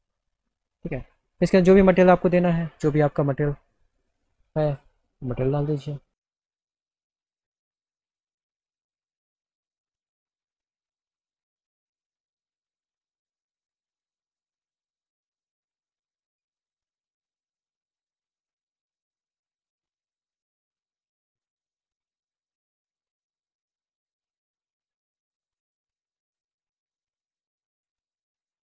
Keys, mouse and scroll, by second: 1.7 click, 4.8 click, 6.9 click, 7.6-8.9 scroll down 2, 8.9-9.5 scroll down 1, 9.4 middle click, 11.6 click, 12.7 click, 14.0 click, 16.5 click, 17.5 click, 18.0 click, 18.4 click, 18.7 right click, 19.4 click, 22.9 click, 23.9 click, 25.6 click, 27.1 click, 27.3 click.